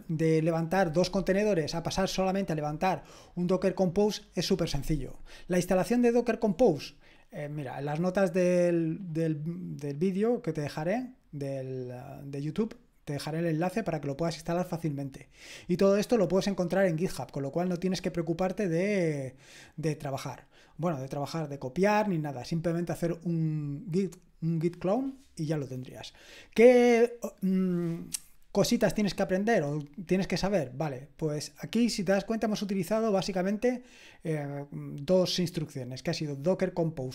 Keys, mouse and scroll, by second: 4.1 click, 13.9-15.6 scroll down 1, 15.6-17.2 scroll down 1, 17.2-18.0 scroll down 1, 18.0-18.9 scroll down 1, 26.2-29.5 drag.